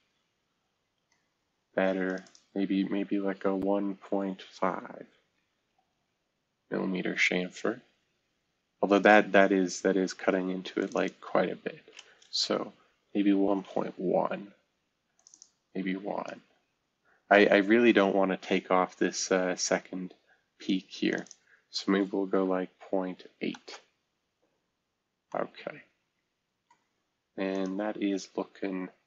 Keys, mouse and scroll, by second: 2.1 click, 5.3-5.7 typing, 5.9 Return, 7.2-8.2 scroll down 2, 7.4 typing, 8.2-8.8 scroll up 1, 8.8-9.4 scroll up 1, 10.8-11.9 drag, 12.0 click, 13.0-13.5 typing, 13.7 Return, 15.1-16.5 drag, 15.7 typing, 16.5 Return, 21.1 click, 21.2 click, 22.3-23.2 typing, 23.6 Return, 25.3 middle click, 25.5 typing, 27.5-29.0 drag.